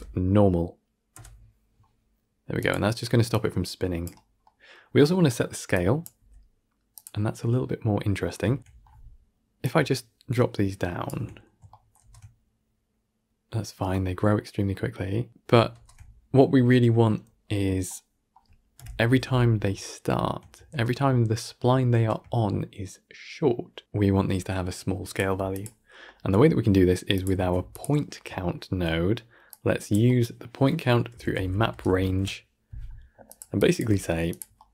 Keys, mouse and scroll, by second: 3.2-5.9 drag, 8.6 shift+Left, 8.7 shift+Down, 9.8-11.3 drag, 11.3-11.6 scroll up 1, 11.6 shift+middle drag, 11.9 shift+space, 18.0 shift+space, 18.7 shift+Left, 19.4-19.8 scroll up 4, 19.8-20.6 shift+middle drag, 20.6 shift+space, 21.8 shift+space, 24.6-25.1 drag, 27.0 click, 27.3 shift+d, 29.8 click, 33.5 drag.